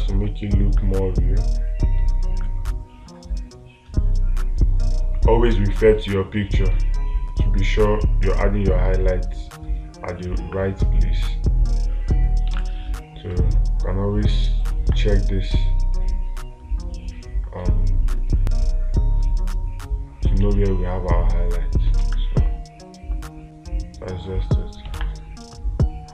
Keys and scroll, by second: 13.0 space, 22.4 space, 25.4 space.